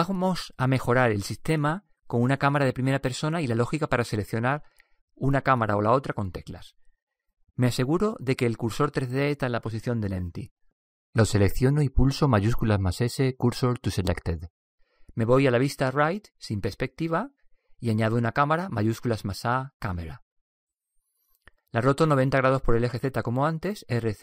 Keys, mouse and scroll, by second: 11.1 right click, 13.5 shift+s, 16.3 KP_3, 19.4 shift+a, 22.3-22.7 middle drag, 23.0-24.0 middle drag, 24.1 middle click.